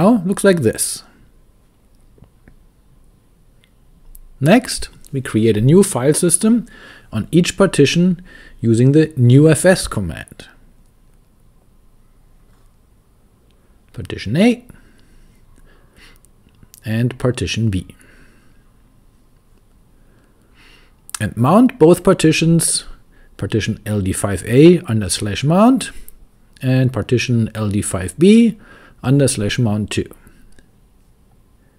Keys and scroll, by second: 0.1 shift+p, 2.0 Return, 7.3 shift+q, 8.3 Return, 8.4 typing, 11.3-13.7 typing, 15.0 Return, 17.1 Up, 17.8-30.6 typing, 18.3 Return.